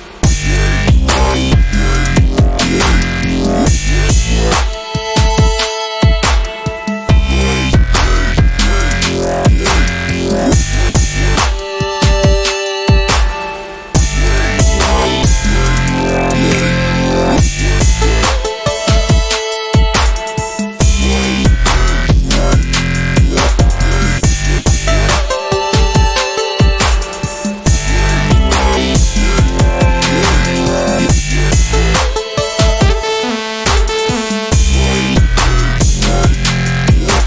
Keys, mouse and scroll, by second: 2.9 ctrl+d, 4.0 click, 4.0-5.0 typing, 4.8-7.2 drag, 16.7 r, 18.3 v, 18.6 click, 19.7 ctrl+shift+p, 20.4 ctrl+d, 21.4 click, 28.4 e, 28.8-31.9 drag, 33.4 ctrl+d, 33.6-35.4 drag, 35.4 ctrl+d, 35.9-37.2 drag.